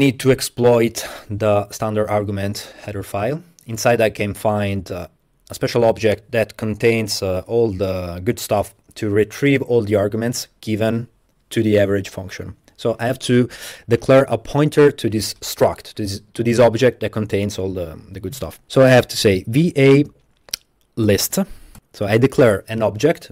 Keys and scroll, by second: 19.1-21.1 typing, 21.8 Return.